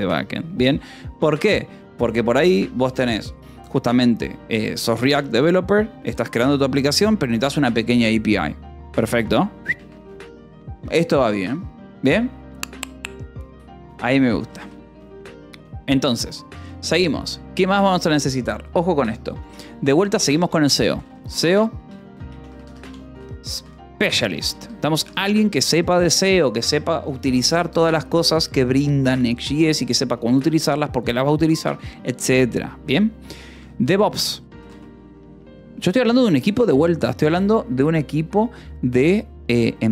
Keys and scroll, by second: 1.2 ctrl+s, 9.5 shift+v, 9.7 Escape, 11.8 o, 14.4 :, 14.5 space, 21.0-26.1 typing, 33.5 e, 34.1 o, 34.5 s, 34.6 space.